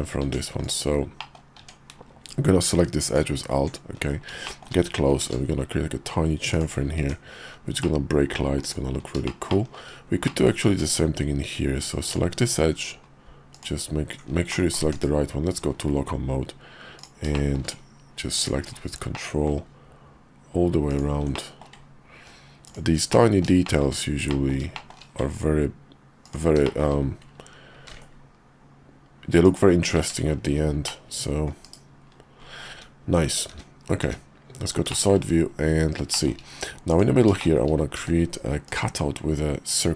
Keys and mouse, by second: 0.3 Tab, 0.6 click, 1.2 click, 1.6 Tab, 3.0 alt+click, 4.4 shift+click, 5.2 ctrl+b, 7.0 Tab, 7.8 middle click, 8.6 click, 9.2 shift+middle click, 9.6 shift+middle click, 10.2 middle click, 10.7 Tab, 12.0 alt+click, 13.5 alt+click, 14.5 middle click, 14.9 /, 17.0 click, 17.3 shift+click, 18.3 ctrl+click, 19.1 middle click, 20.9 ctrl+click, 21.4 middle click, 22.6 ctrl+click, 23.1 middle click, 23.6 shift+middle click, 24.3 middle click, 24.7 shift+middle click, 26.2 ctrl+click, 26.6 shift+click, 27.7 ctrl+b, 30.0 Tab, 30.9 middle click, 31.6 /, 32.7 `, 33.5 `, 34.0 `, 34.9 shift+middle click, 35.3 KP_5, 36.1 shift+middle click, 36.9 click, 37.4 shift+click, 38.0 d.